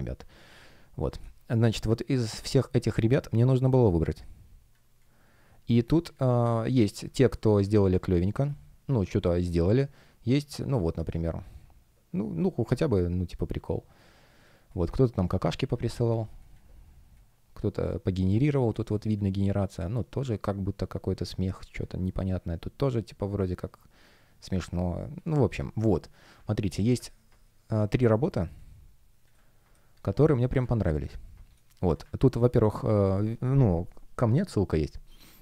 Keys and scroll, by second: 2.8 space, 5.7 space, 10.8 super+space, 13.6 space, 27.4 space, 29.6 space, 31.5 space.